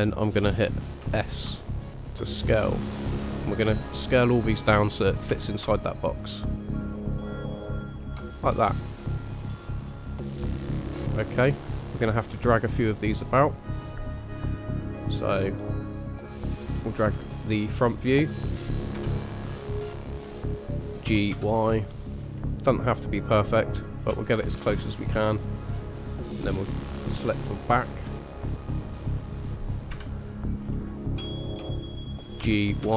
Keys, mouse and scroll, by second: 0.3 scroll up 2, 1.0 s, 3.0-3.5 scroll up 3, 4.1-5.3 scroll up 2, 5.3 s, 8.8 middle click, 12.9 click, 15.4 click, 16.3 click, 17.2 middle click, 18.9 KP_3, 19.5-20.3 scroll up 1, 20.3-21.0 scroll up 1, 21.0 g, 24.4-25.1 scroll down 2, 25.1 middle click, 26.6 click, 27.7 click, 28.4 click, 29.9 KP_3, 30.6 scroll up 1, 31.2 scroll up 1, 31.2 shift+middle click, 32.4 g.